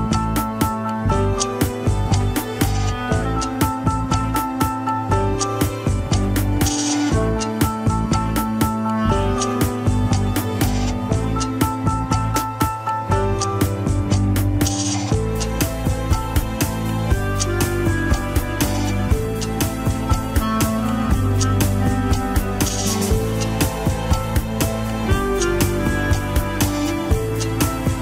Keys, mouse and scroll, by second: 0.0 ctrl+s, 2.5 scroll up 4, 3.0 click, 3.6 shift+click, 4.2 ctrl+Tab, 4.8 scroll up 2, 5.1 shift+middle click, 5.5 alt+z, 6.7 ctrl+click, 7.2 middle click, 7.7 scroll up 1, 7.8 alt+z, 8.1 middle click, 8.8 scroll down 2, 9.0 alt+z, 9.8 ctrl+click, 9.9 alt+z, 10.2 scroll up 2, 10.4 middle click, 11.2 scroll down 1, 13.1 ctrl+click, 15.6 alt+z, 16.4 ctrl+click, 16.6 alt+z, 20.5 click, 20.7-23.2 middle drag, 23.7 scroll down 1, 24.6-26.4 drag, 26.4 middle click, 26.9-27.4 scroll up 1, 27.4 click.